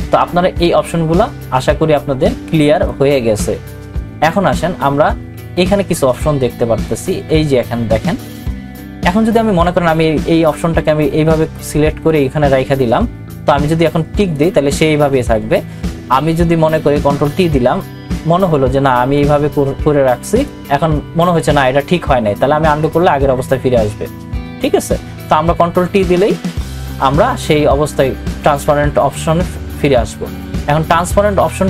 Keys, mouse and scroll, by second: 2.9-10.7 drag, 10.7-14.3 drag, 17.0 ctrl+t, 19.2-22.8 drag, 22.8 click, 26.3 ctrl+t, 27.9-31.6 drag.